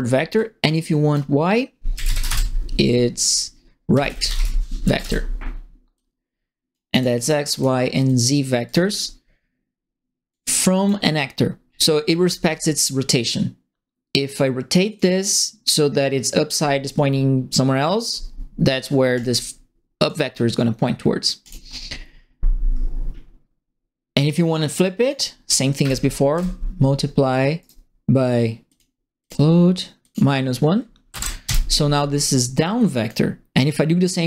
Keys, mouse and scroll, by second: 0.3 click, 1.6-2.6 typing, 3.6-4.6 typing, 4.8 Up, 5.0 Return, 5.9 click, 6.9 click, 7.2 click, 7.5 click, 8.0 click, 8.6 click, 10.3 click, 11.6 middle click, 14.8 click, 19.1 click, 20.0 click, 21.4 click, 21.8 middle click, 24.8 click, 25.8 KP_Multiply, 26.3 Return, 27.6 right click, 28.6 click, 29.2 click, 30.0 click, 31.0 KP_Subtract, 31.4 KP_Enter, 32.1 click, 32.7 click.